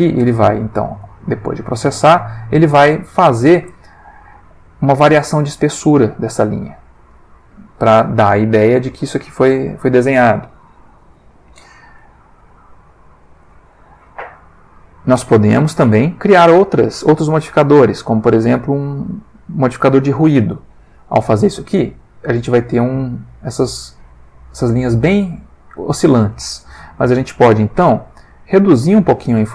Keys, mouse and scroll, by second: 2.2 click, 6.4-7.2 middle drag, 8.9 space, 9.2 click, 9.6 Escape, 12.5-13.5 alt+middle drag, 15.6 click, 16.6 click, 18.8 click, 19.9 middle click, 21.0 F12, 24.3 click, 27.0 middle click, 28.3-29.5 drag.